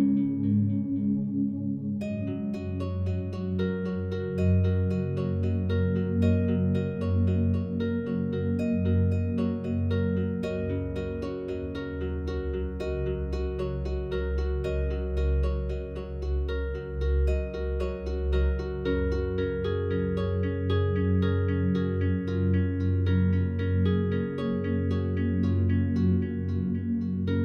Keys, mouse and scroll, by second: 0.1 click, 1.4 click, 4.6 click, 7.5-8.1 drag, 10.2 click, 12.0 click, 13.9 ctrl+s, 17.1 click, 18.3 click, 18.5 click, 19.7 click, 19.9 click, 21.3 click, 21.5 click, 21.8 click, 23.1 click, 23.3 click, 23.6 click, 24.2 click, 24.3 click, 25.0 drag.